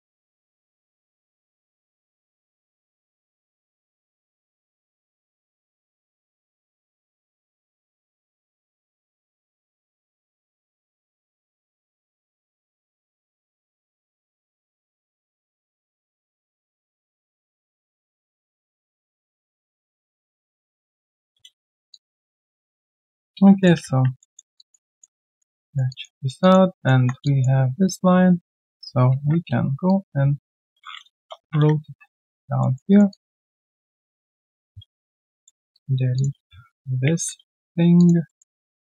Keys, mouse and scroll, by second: 0.0 right click, 0.0 q, 0.6 alt+middle click, 1.4 alt+scroll down 1, 1.8 alt+middle click, 2.2 alt+click, 2.8 alt+right click, 3.1 alt+click, 3.3 alt+middle click, 3.6 alt+click, 4.1 alt+right click, 4.6 right click, 6.2 ctrl+shift+Delete, 7.6 ctrl+Delete, 8.5 alt+click, 8.8 alt+middle click, 9.1 alt+click, 9.7 alt+middle click, 10.5 alt+click, 10.8 right click, 10.8 q, 11.7 w, 12.5 ctrl+shift+q, 14.0 alt+click, 14.5 alt+middle click, 14.9 alt+click, 16.4 ctrl+z, 16.9 alt+click, 18.5 alt+middle click, 18.8 alt+click, 19.9 alt+middle click, 20.1 alt+click, 20.4 alt+scroll down 1, 20.8 alt+click, 21.1 ctrl+z, 21.5 alt+scroll down 2, 21.9 alt+click, 22.9 alt+right click, 23.2 alt+click, 24.2 alt+middle click, 24.5 alt+click, 24.9 alt+middle click, 25.1 alt+right click, 25.4 alt+middle click, 25.6 alt+right click, 25.8 alt+click, 26.1 alt+right click, 26.4 alt+click, 26.7 alt+middle click, 27.2 alt+click, 28.6 alt+click, 29.1 ctrl+shift+x, 31.1 Return, 32.2 alt+click, 32.6 alt+middle click, 32.9 alt+right click, 33.1 alt+click, 33.9 right click, 33.9 q, 35.1 shift+click, 35.4 alt+middle click, 36.1 shift+click, 37.9 alt+click, 38.2 alt+middle click.